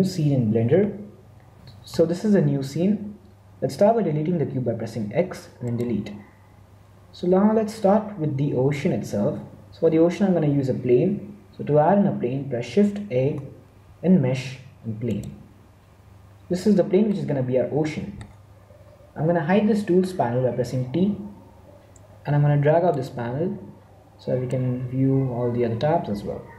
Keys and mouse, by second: 20.8 t, 22.8-24.7 drag.